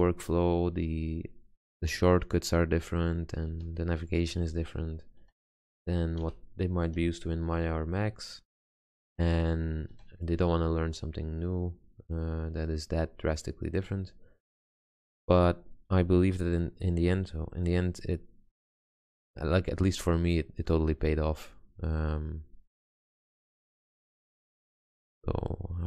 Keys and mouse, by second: 0.1 g, 3.7 a, 4.6 b, 5.4 g, 6.4 a, 7.1 b, 7.7 g, 10.1 a, 11.9-13.0 middle drag, 16.1 z, 17.3 z.